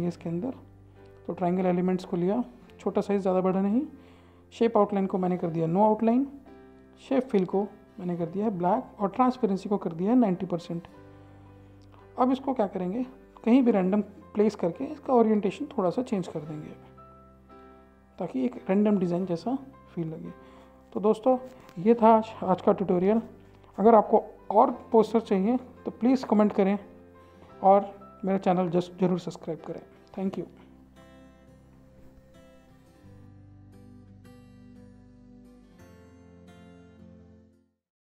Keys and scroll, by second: 10.3-11.5 typing, 12.6 typing.